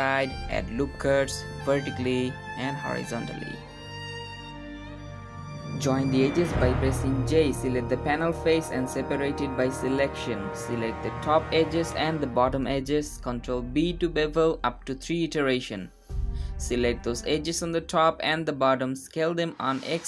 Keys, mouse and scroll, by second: 0.0 ctrl+r, 0.8 middle click, 0.9 ctrl+r, 2.2 ctrl+r, 3.1 click, 5.6 click, 6.3 middle click, 6.3 shift+click, 6.9 shift+click, 7.1 j, 7.3 Tab, 7.4 click, 7.6 shift+click, 7.9 j, 7.9 middle click, 8.0 click, 8.1 shift+click, 8.3 j, 8.4 3, 8.7 click, 9.2-9.7 scroll up 3, 9.7 p, 10.5 Tab, 10.9 click, 11.0 g, 12.2 alt+click, 12.6 middle click, 12.7 alt+shift+click, 13.1 middle click, 13.2 alt+shift+click, 13.9 ctrl+z, 14.2 ctrl+b, 15.9 2, 15.9 click, 16.6 alt+click, 18.0 alt+shift+click, 18.1 middle click, 18.4 alt+shift+click, 19.4 alt+shift+click, 19.9 middle click.